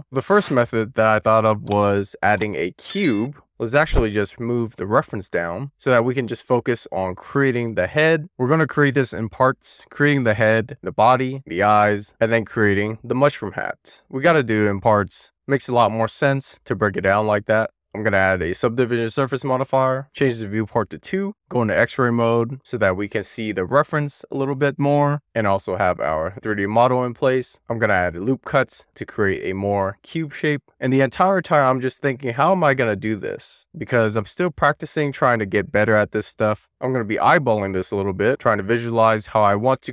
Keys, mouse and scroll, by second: 0.0 shift+middle click, 0.7 scroll up 1, 1.0 shift+a, 3.4 click, 4.2 drag, 5.8 shift+middle click, 6.2 middle click, 6.5 shift+middle click, 6.8 scroll down 1, 6.9-7.4 middle drag, 7.4-8.0 scroll down 1, 8.1 alt+middle click, 8.3 alt+middle click, 9.2 click, 11.1 click, 11.6 click, 12.4 click, 15.7 click, 16.2 click, 17.3 click, 17.6 click, 18.7 click, 19.2-20.6 scroll up 1, 20.6 click, 21.3 ctrl+alt+x, 21.7 alt+z, 22.3 alt+z, 22.9 alt+z, 23.4 alt+z, 23.9-25.1 scroll up 2, 25.5 click, 28.8 right click, 29.4 ctrl+r, 29.7 right click, 30.0 ctrl+z.